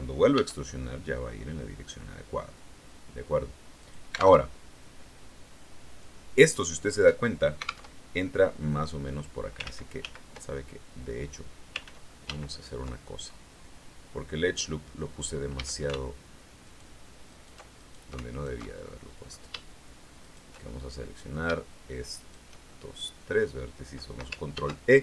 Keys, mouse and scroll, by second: 0.3 e, 3.7 click, 4.3 alt+Tab, 7.8 alt+Tab, 9.6 ctrl+z, 11.7 ctrl+z, 14.3 click, 15.5 a, 16.5 alt+shift+right click, 17.2 alt+shift+right click, 17.7 alt+shift+right click, 18.2 alt+shift+right click, 18.5 alt+shift+middle click, 20.1 shift+right click, 20.6 shift+middle click, 22.1 shift+right click, 22.6 shift+right click, 23.2 middle click, 24.5 ctrl+e.